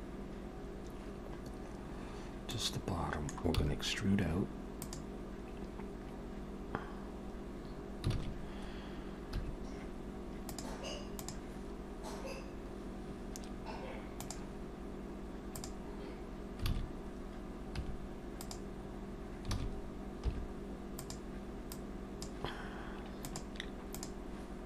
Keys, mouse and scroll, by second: 2.5 middle click, 3.5 e, 8.2 alt+a, 9.3 2, 15.6 click, 16.7 alt+a, 17.7 2, 18.5 click, 19.6 alt+a, 20.3 3, 21.0 click, 21.7 click.